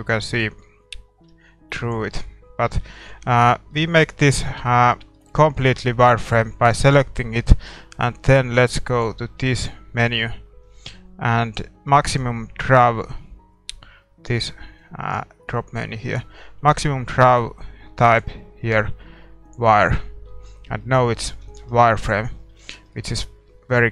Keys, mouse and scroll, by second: 1.2 s, 2.5 z, 3.2 a, 5.1-14.8 middle drag, 6.7-14.8 right drag, 14.8-20.0 drag, 20.0-20.4 scroll down 1, 20.3 a, 20.4-20.8 scroll up 1, 20.8-23.9 middle drag, 21.1-22.9 drag, 21.7 ctrl+s, 22.9 ctrl+s.